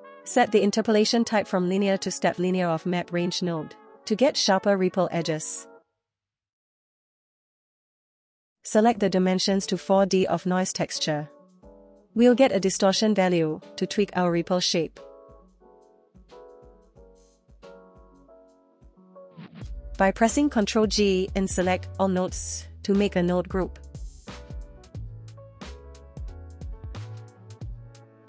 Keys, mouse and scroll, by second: 3.5-5.1 drag, 5.1 space, 5.4 space, 5.6 space, 5.8 space, 6.0 shift+click, 7.2 middle click, 8.5 click, 9.4-10.5 drag, 12.7 click, 13.4 click, 13.9 space, 14.0 space, 14.4 shift+click, 15.6 click, 15.9 middle click, 16.1 middle click, 16.3 middle click, 16.9-17.9 drag, 18.0 shift+middle click, 18.2 scroll up 1, 19.0 click, 20.5-21.0 scroll down 1, 21.0-21.8 scroll down 2, 21.8 middle click, 22.2-23.0 drag, 23.3 ctrl+g, 24.2 click, 24.3 middle click, 24.4 scroll up 3, 24.6 click, 24.8 middle click, 25.9-27.0 scroll up 2, 27.0-27.9 drag.